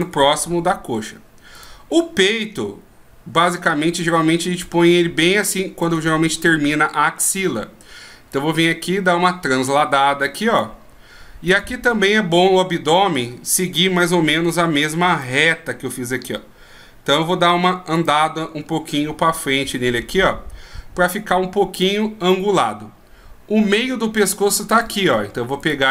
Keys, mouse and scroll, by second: 1.7 right click, 4.1 d, 4.2 click, 6.0 d, 6.1 d, 8.5 click, 11.7 click, 15.3 d, 15.4 click, 17.3 d, 17.4 d, 18.1 right click, 19.1 click, 23.8 d, 23.9 click, 25.0 d, 25.8 right click, 25.8 d.